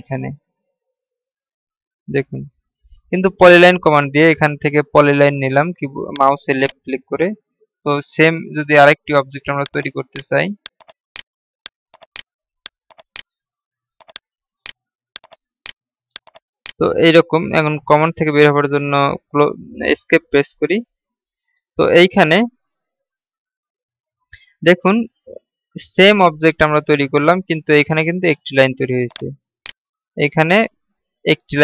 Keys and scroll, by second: 5.2-5.9 typing, 20.5 Escape.